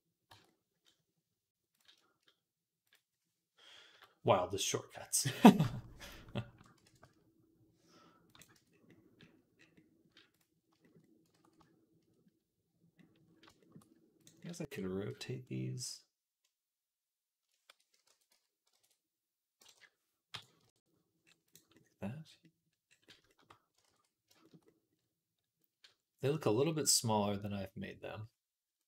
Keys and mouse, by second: 0.1 Tab, 1.6-2.7 shift+drag, 3.7 KP_Decimal, 6.7 alt+s, 8.2-10.1 middle drag, 8.4 Tab, 10.1 click, 10.2-14.0 middle drag, 11.2 ctrl+s, 12.8 ctrl+s, 14.0 click, 14.2-24.7 middle drag, 14.4 r, 17.9 r, 21.3 click, 21.3 right click, 23.7 ctrl+s, 25.5-26.5 middle drag, 27.5-28.8 middle drag.